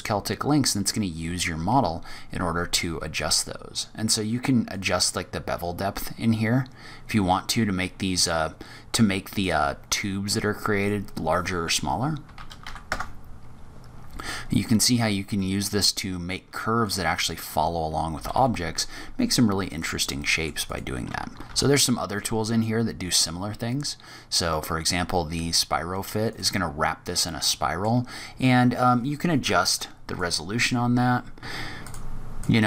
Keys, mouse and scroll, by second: 0.0-1.2 scroll up 3, 4.6 click, 7.4 middle click, 9.2 click, 10.7 click, 14.0 middle click, 14.9-15.4 scroll down 2, 15.3 middle click, 16.7 click, 18.0 g, 20.0 middle click, 20.6 click, 21.3 shift+a, 27.1 middle click, 29.0 click, 31.4 click, 31.9 click, 32.2 click.